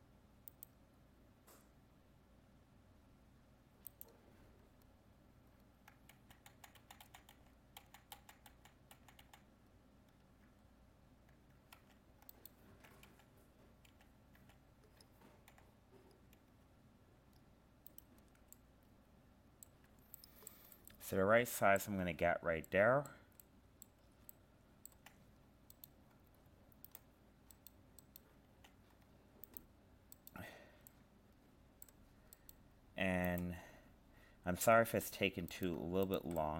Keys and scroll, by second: 6.1 ctrl+z.